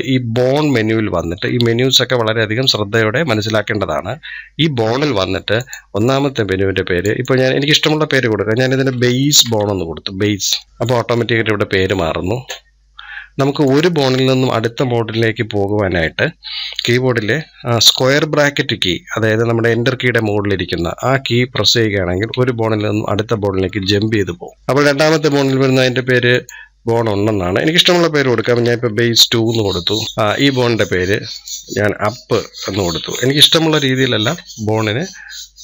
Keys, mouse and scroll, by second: 13.5-16.5 drag, 21.4 ], 22.8-24.7 typing, 26.1-34.2 drag.